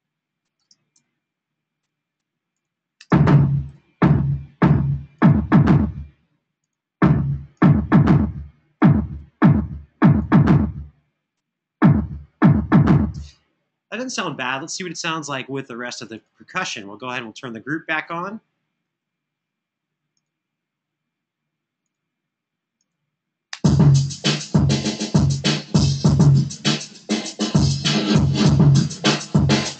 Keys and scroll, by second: 0.3 space, 0.8 super+=, 2.7 space, 3.4 super+=, 12.9 space, 18.8 super+=, 23.2 space, 28.4 super+=.